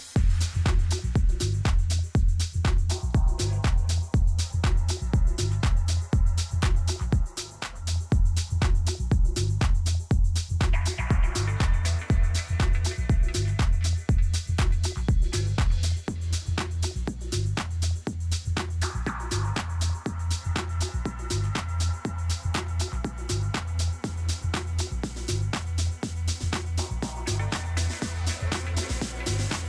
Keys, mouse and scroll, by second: 0.2 a, 0.5 a, 1.4 b, 3.2-5.0 drag, 5.5-6.6 middle drag, 6.6 a, 7.1 z, 7.6 Tab, 8.0 middle click, 27.8 n, 28.2-29.6 middle drag.